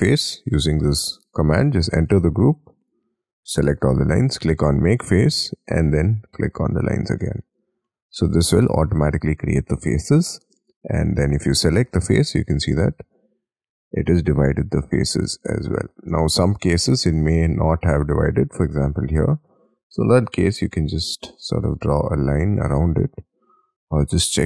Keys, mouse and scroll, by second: 2.8 double click, 7.3-7.8 scroll up 6, 7.8 middle click, 10.0-10.3 scroll down 2, 12.5 double click, 13.8-15.4 scroll up 16, 15.4 double click, 15.6-16.2 scroll down 11, 16.2-17.0 scroll up 10, 17.2-17.7 scroll down 12, 18.2-18.9 scroll up 11, 18.9 l, 20.0 double click, 20.9-21.9 scroll up 4, 21.9-23.0 scroll down 5, 23.0-23.8 scroll down 19, 24.0-24.4 scroll up 19.